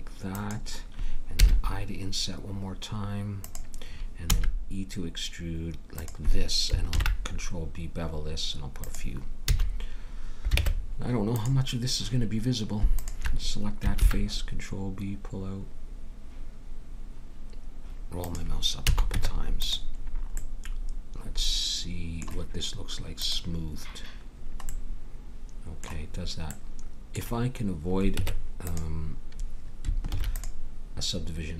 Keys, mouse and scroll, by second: 1.3 i, 4.3 e, 6.9 ctrl+b, 9.4 a, 10.5 ctrl+Tab, 13.1-14.8 drag, 13.9 ctrl+b, 18.8 a, 19.1 Tab, 23.2-25.1 drag, 24.7-28.1 middle drag, 28.1 Tab, 30.1 ctrl+r.